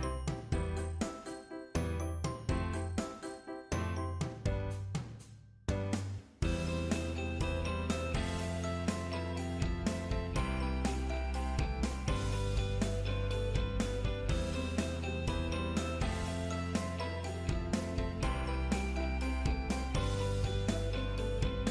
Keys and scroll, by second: 11.3 ctrl+Down.